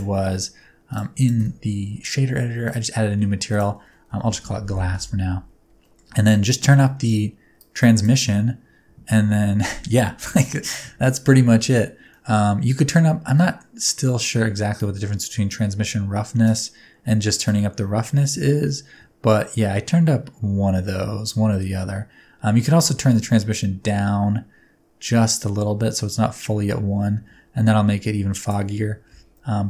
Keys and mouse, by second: 0.9 click, 1.1 click, 2.6 click, 3.6 click, 4.6 s, 5.8 middle click, 6.3 middle click, 7.6 click, 12.1 middle click, 13.3 middle click, 13.9 middle click, 14.7 click, 17.5 click, 22.7 shift+click, 29.2 space.